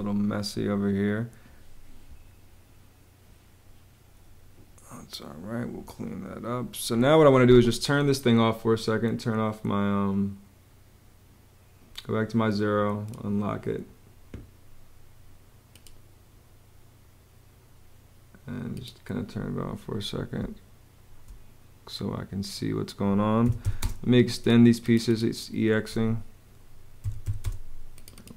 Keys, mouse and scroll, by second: 20.1 space, 22.9-23.9 typing, 25.6 Escape, 26.5-27.5 typing.